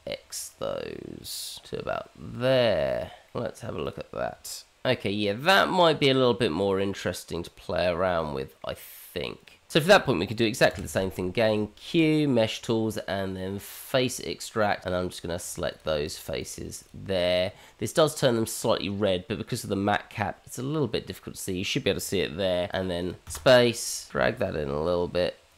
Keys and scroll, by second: 3.3 Tab, 5.3 h, 11.1 Tab, 11.2 q.